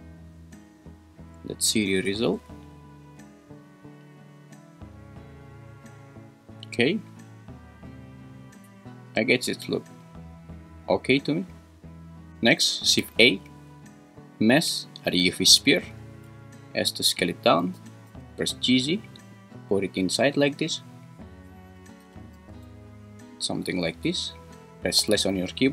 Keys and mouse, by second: 1.7 g, 2.1 z, 13.0 shift+a, 16.2 s, 17.3 click, 17.7 g, 18.1 z, 20.5 click, 22.0 g, 22.3 z, 23.3-25.0 drag, 25.0 /.